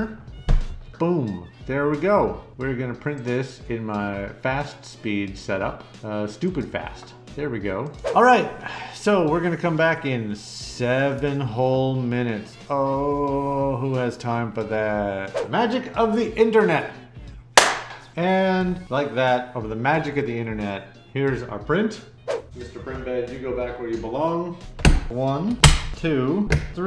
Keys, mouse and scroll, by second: 1.1 scroll up 4, 1.2 middle click, 1.4 middle click, 3.1 click, 4.6 click, 6.4 click, 7.8 click.